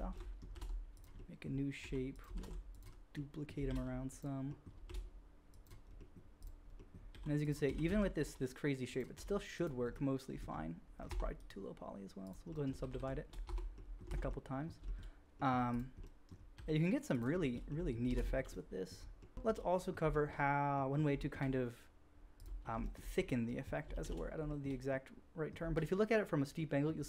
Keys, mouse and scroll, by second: 0.5 shift+d, 1.8 g, 2.4 shift+d, 2.7-3.3 middle drag, 3.7 shift+d, 4.8 shift+d, 6.1-6.7 middle drag, 7.1 g, 7.6 r, 9.1 g, 11.0 Tab, 11.3-15.6 drag, 12.8 shift+r, 13.2 shift+r, 13.4 Tab, 14.0 alt+a, 15.6 middle click, 15.7-16.4 drag, 16.6 g, 18.1 alt+a, 18.3-23.2 drag, 22.3 middle click, 22.3 right click, 23.2 middle drag, 23.3 click, 23.4 middle drag, 23.9 shift+s, 26.1-27.0 drag.